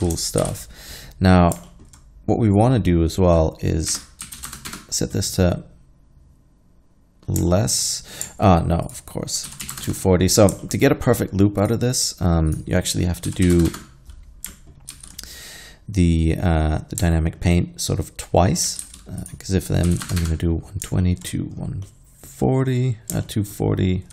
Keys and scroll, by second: 0.5 shift+Left, 4.0 -, 4.2 i, 4.4 2, 4.5 0, 4.7 Return, 9.5 2, 9.7 4, 9.7 0, 9.9 Return, 13.3 2, 13.5 KP_4, 13.5 KP_0, 13.7 Return, 15.0 alt+a, 18.9 alt+a, 19.9 1, 20.0 2, 20.1 0, 20.2 Return.